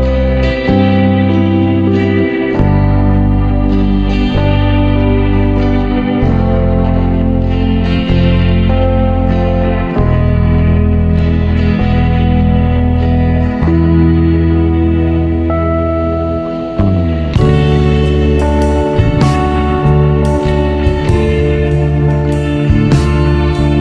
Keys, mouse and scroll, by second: 0.6 Tab, 1.2-1.7 scroll down 1, 1.7 click, 2.6 click, 4.2 KP_1, 5.3 ctrl+KP_3, 5.9-6.3 scroll up 2, 7.6-8.6 drag, 8.6 shift+a, 10.5 s, 11.8 click, 12.9-14.2 scroll up 5, 14.2-16.1 drag, 18.1 Tab, 18.5 click, 19.8 b, 21.4 click, 23.3 click.